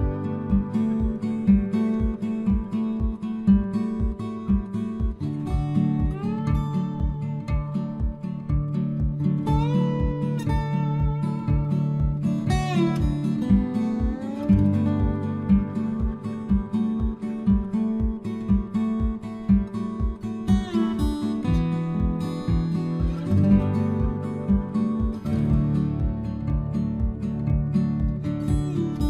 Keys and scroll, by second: 5.6 ctrl+a, 6.1 ctrl+v.